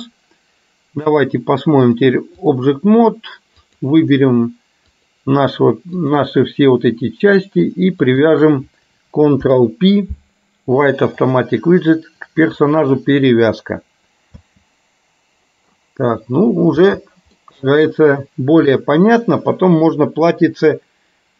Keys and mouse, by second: 2.1 click, 8.2 shift+click, 9.4 ctrl+p, 14.6 space, 17.1 space, 17.4 middle click, 18.8-21.3 middle drag.